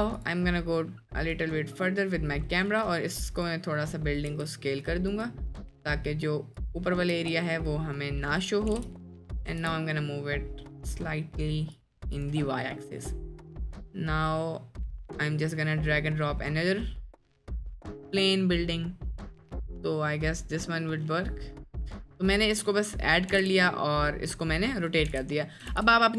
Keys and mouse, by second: 1.3-2.9 drag, 3.4 click, 4.3 s, 6.6 drag, 7.2 s, 8.7 g, 9.5 g, 13.5-15.6 drag, 17.2 middle click, 21.1-21.6 middle drag, 22.0 middle drag, 22.5-22.9 drag, 22.9 middle click, 23.4 r, 25.1 r.